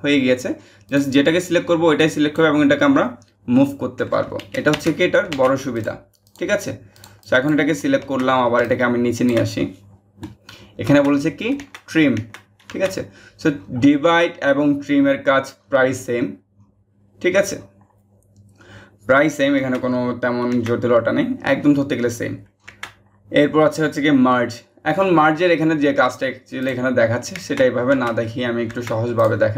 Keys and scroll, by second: 4.3 ctrl+z, 4.9 ctrl+z.